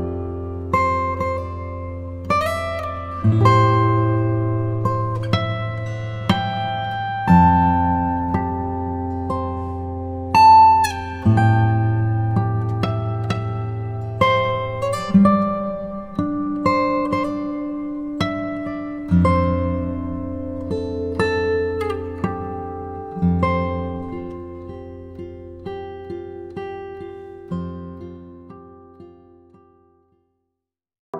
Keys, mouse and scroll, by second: 0.4 ctrl+click, 0.7-1.2 scroll down 1, 1.8 ctrl+r, 2.9 ctrl+click, 3.5 ctrl+r, 4.9 ctrl+click, 5.8 3, 6.1 click, 8.3 e, 8.3 s, 9.3 click, 9.5 middle click, 10.3-12.2 drag, 12.2 middle click, 13.8 click, 14.6 e, 14.7 s, 16.1 click, 16.2 Tab, 16.6-17.5 middle drag, 17.5 scroll down 2, 19.0 s, 19.2 z, 20.8 click, 21.2 click, 22.4 g, 22.7 z, 23.9 click, 24.1-25.6 middle drag, 25.6 KP_7, 26.6 g, 27.1 x, 28.5 click, 29.0-30.6 middle drag, 30.6 scroll down 1.